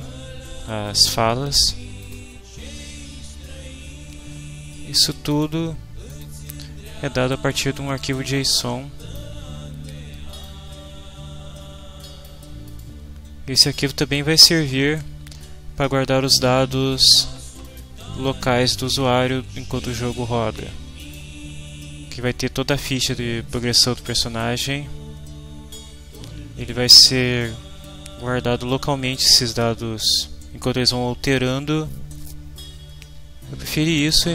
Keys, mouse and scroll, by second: 2.0-3.4 drag, 5.4 click, 6.1 click, 8.0-9.4 drag, 10.4-12.4 drag, 12.6 click, 17.6 click, 21.0 click, 34.0 click.